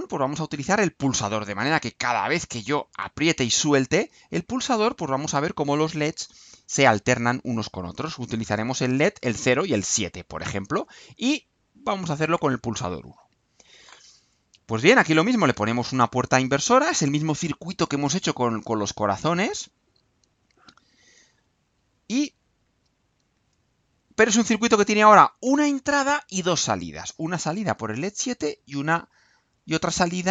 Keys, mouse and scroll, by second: 6.6 click, 7.7 click, 9.4 Delete, 11.3 click, 12.3 click, 15.2 click, 17.1 click, 18.1 click, 19.8-20.9 drag, 21.5 click, 22.6 ctrl+c, 23.8 ctrl+v, 23.9-25.3 ctrl+drag, 26.9 click, 28.1 click, 29.3 click.